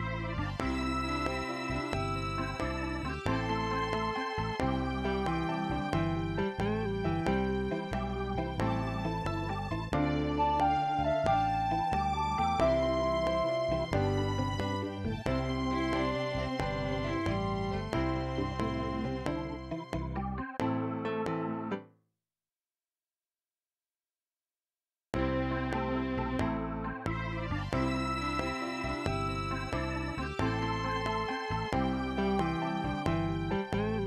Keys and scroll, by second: 21.7 space, 25.0 space, 25.5 ctrl+Left.